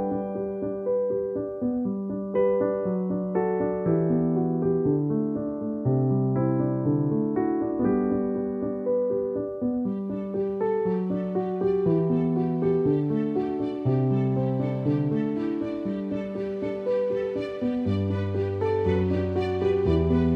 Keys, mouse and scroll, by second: 0.2 space, 0.3 click, 0.5 space, 0.9-4.9 drag, 7.1 space, 7.3 click, 7.4 space, 11.0 right click, 11.8-14.0 drag, 14.0 typing, 14.2 right click, 14.9 click, 15.6 ], 15.9 click, 17.1-18.7 alt+drag, 18.7 space, 19.3 alt+click, 20.1 alt+click.